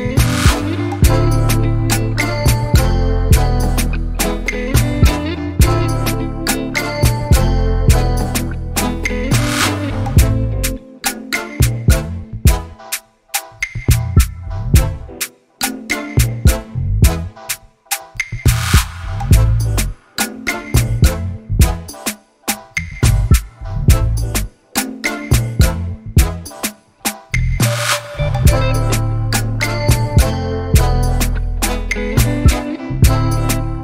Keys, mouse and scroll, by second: 0.5 s, 3.3 alt+click, 3.8 s, 7.7 Tab, 8.6 Tab, 9.2-11.3 shift+middle drag, 11.3 alt+click, 12.8 s, 20.4 s, 22.8 alt+click, 23.4 s, 26.8 middle click, 27.4 3, 27.7 x, 29.1 KP_2, 30.6-31.1 scroll down 2, 31.1-31.7 scroll up 1, 31.7-32.1 scroll down 1, 32.1 z, 32.9 click.